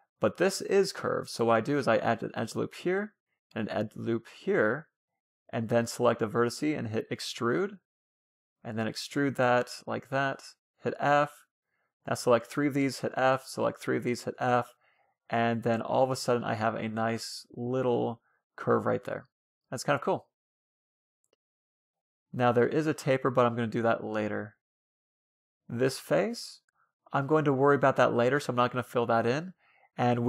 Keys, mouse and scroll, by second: 0.9 ctrl+r, 2.7 ctrl+r, 4.2-7.5 middle drag, 5.6-7.3 right drag, 6.9 e, 7.9 e, 8.5 e, 9.3-18.6 right drag, 10.0 f, 12.2 f, 13.4 f, 14.8 f, 17.2 f, 17.5 a, 17.6 a, 18.6-19.9 middle drag, 19.9 scroll up 1, 20.1-20.8 scroll down 1, 21.3-25.6 middle drag.